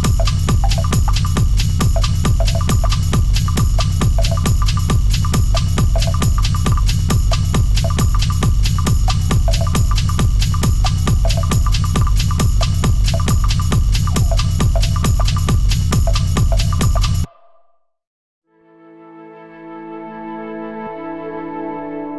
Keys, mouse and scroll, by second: 0.3 right click, 1.1 click, 1.5 scroll down 1, 1.8 shift+middle click, 2.5 g, 5.0 click, 5.7-7.5 right drag, 7.5 click, 8.2 g, 10.6 shift+click, 11.2-13.1 right drag, 13.1 click, 13.8 g, 16.3 click, 16.6 g, 21.0 click, 21.6 g.